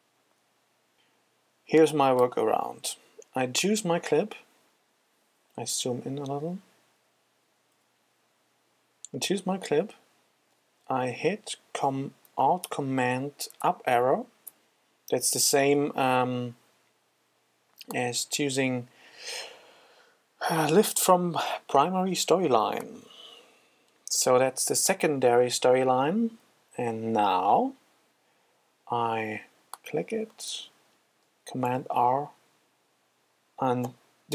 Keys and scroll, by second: 0.0 super+z, 6.9 F5, 13.6 alt+super+Up, 15.6 super+z, 31.5 super+r.